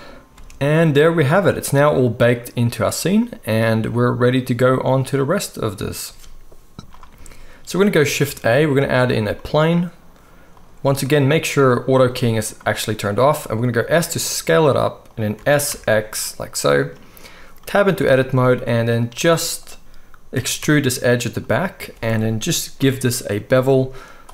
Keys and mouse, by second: 0.3 space, 6.8 space, 6.8 z, 8.0 shift+a, 10.6-19.1 middle drag, 12.6 click, 13.8 s, 15.3 s, 18.0 Tab, 19.1 click, 19.7-24.3 middle drag, 20.4 e, 22.8 ctrl+b.